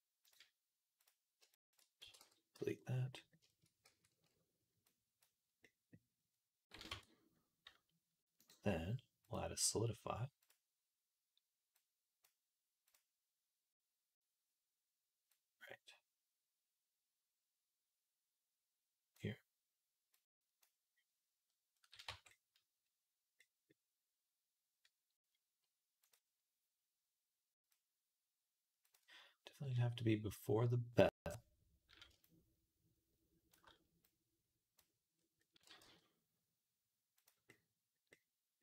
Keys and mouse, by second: 1.3 shift+click, 1.8 x, 2.4 z, 2.7-4.9 middle drag, 3.7 a, 4.9-12.1 drag, 6.7 Tab, 12.1 right click, 12.8-19.0 drag, 19.0 right click, 19.9 click, 20.4 right click, 21.3-25.9 middle drag, 21.9 Tab, 25.9-31.2 drag, 31.2 middle click, 32.0-37.1 shift+drag, 35.5 g, 37.1 middle click, 37.9 click, 38.1 middle click, 38.5-38.6 drag.